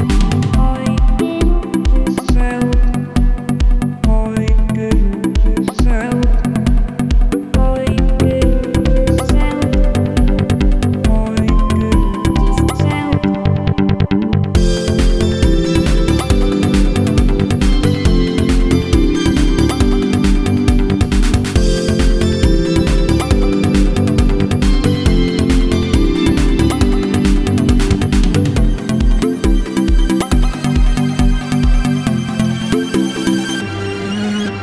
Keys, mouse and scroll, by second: 1.5-8.1 drag, 8.1-11.4 middle drag, 11.4-22.5 drag, 22.5 right click, 23.5-26.9 drag, 26.9-29.3 middle drag, 29.3-32.8 drag, 32.8-34.6 middle drag.